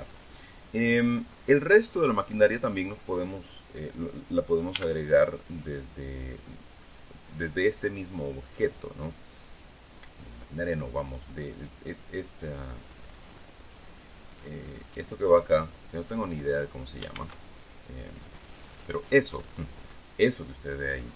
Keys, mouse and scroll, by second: 5.3 a, 17.7 shift+a.